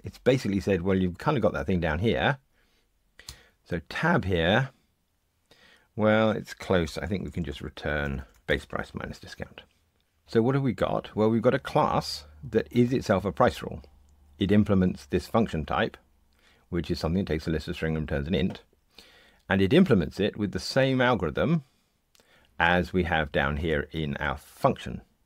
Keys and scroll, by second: 3.2 Tab, 8.5 Tab.